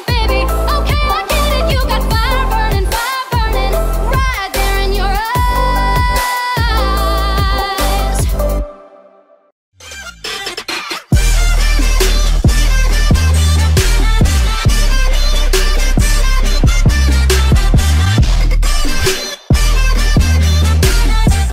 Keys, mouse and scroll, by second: 0.2 click, 1.6 v, 1.9 click, 5.6-6.5 alt+scroll up 1, 7.0-7.5 alt+scroll down 1.